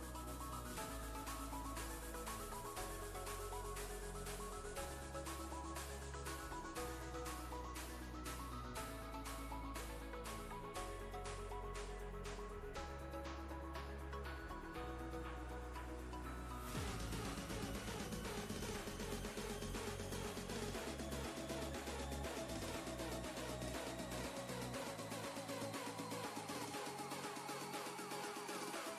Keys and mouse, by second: 1.2 click, 1.2 click, 6.3 click, 14.7 ctrl+space, 14.9 ctrl+click, 15.2-16.4 ctrl+space, 25.0 click.